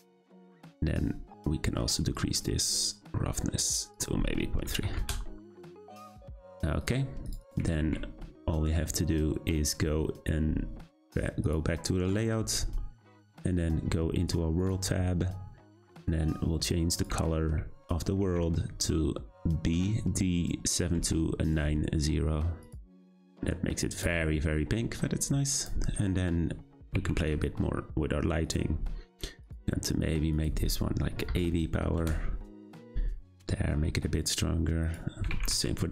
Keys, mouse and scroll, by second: 2.4-11.9 drag, 14.6 click, 24.0 Left, 25.6 click, 26.8 g, 29.4 click, 30.4-33.5 drag, 34.9 click, 35.2 g.